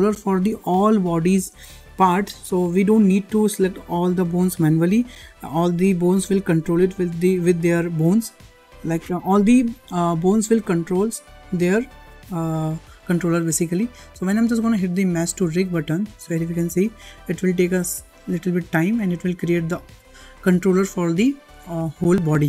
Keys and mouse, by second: 17.7 click.